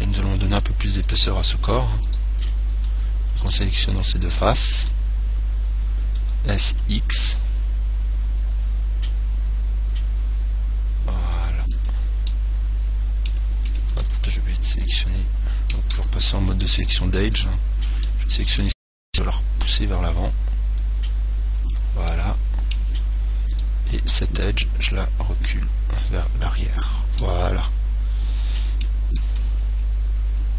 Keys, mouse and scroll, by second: 0.3-1.5 middle drag, 1.3-6.3 right drag, 6.4 s, 12.1 click, 12.5-14.4 middle drag, 14.2 ctrl+Tab, 16.2 ctrl+Tab, 17.6 right click, 18.2-19.3 middle drag, 19.3 click, 19.5 middle click, 22.3-24.1 middle drag, 23.7 right click, 25.1 click, 27.4-29.4 middle drag, 29.5 Tab, 30.2-30.5 scroll up 1.